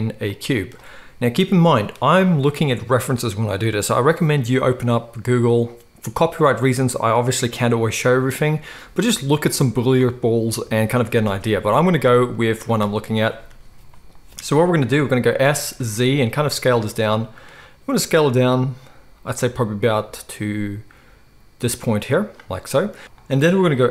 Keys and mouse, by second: 12.3 z, 12.7-15.3 drag, 12.7-15.3 middle drag, 12.7-15.3 right drag, 15.5 s, 22.0-23.1 drag, 22.0 middle click, 22.0 right click, 23.0 s, 23.1-23.9 middle drag.